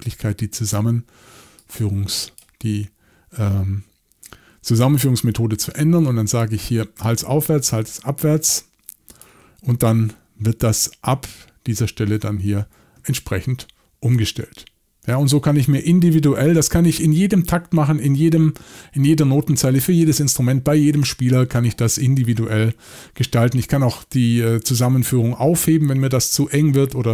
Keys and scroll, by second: 16.3 typing.